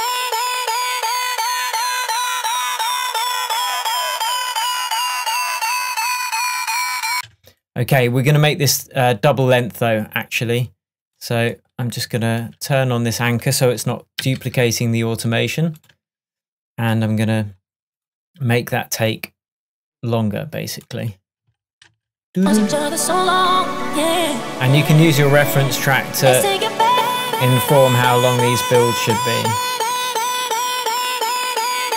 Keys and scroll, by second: 14.3 super+d, 21.5 space.